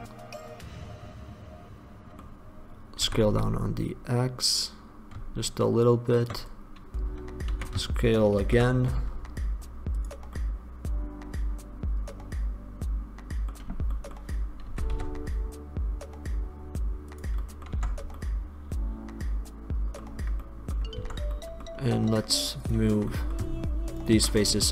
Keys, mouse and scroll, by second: 3.2 s, 6.6-10.5 drag, 7.6 s, 10.5-12.1 middle drag, 12.8-14.1 middle drag, 14.8 s, 17.4 click, 18.0 Tab, 21.2 Tab, 23.2 click.